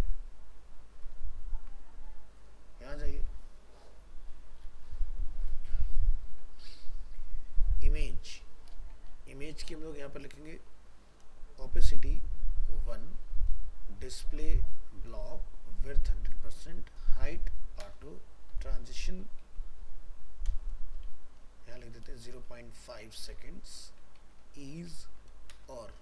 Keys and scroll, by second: 1.1 ctrl+v.